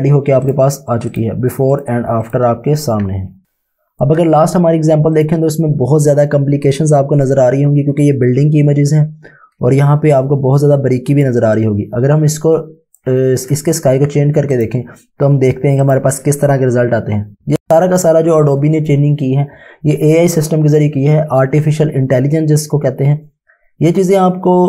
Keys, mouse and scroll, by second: 3.4 ctrl+shift+s, 5.1 click, 9.7 ctrl+Num_Lock, 9.8 space, 10.2 click, 10.3 space, 11.6 click, 11.8 space, 12.1 space, 14.5 click.